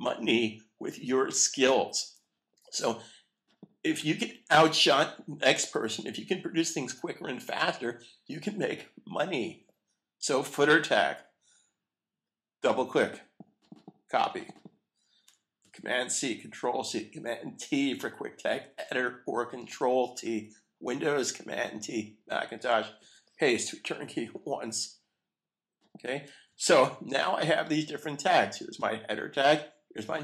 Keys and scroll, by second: 15.6 super+c, 18.6 super+t, 23.0 super+v, 24.2 Return, 26.5 super+s.